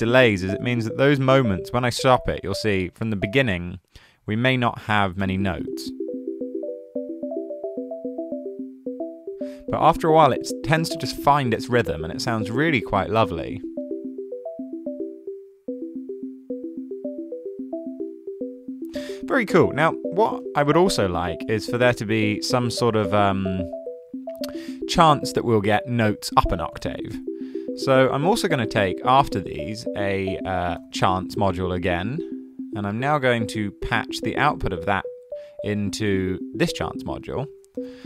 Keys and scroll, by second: 29.9 super+a, 30.5-31.5 typing, 37.6 super+a, 37.7-38.0 typing.